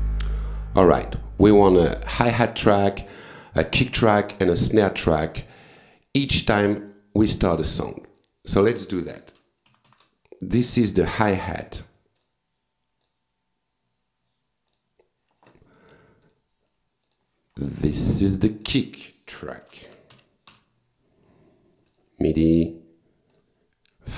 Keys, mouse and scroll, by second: 5.2 right click, 5.9 click, 7.6 click, 9.4 shift+h, 11.6 click, 12.2 click, 13.0 click, 14.7 click, 15.9 click, 16.3 right click, 17.1 click, 18.2 click, 19.4-21.0 typing, 21.9 click, 22.5 click, 23.3 click.